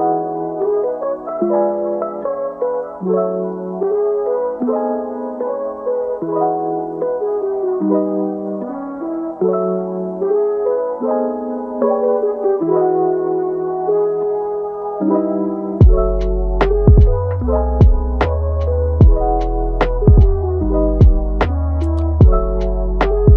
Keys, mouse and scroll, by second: 0.4 r, 2.6 ctrl+t, 3.6 click, 4.6 r, 6.3 click, 6.9 click, 7.3 r, 8.1 g, 10.1 g, 11.8 click, 12.9 click, 13.3 g, 14.7 click, 14.9 g, 16.1 click, 16.3 g, 17.9 click, 18.2 g, 20.6-21.9 scroll up 1, 23.1 click.